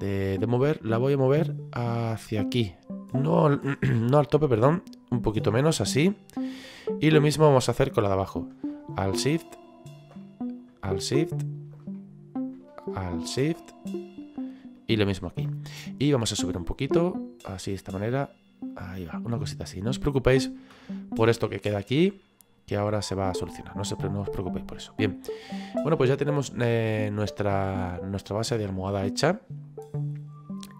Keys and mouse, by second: 1.2 click, 7.3 right click, 10.2 middle click, 11.9 middle click, 13.6 middle click, 16.6 click, 18.9 middle click, 20.0 middle click, 22.2 middle click, 25.8 middle click.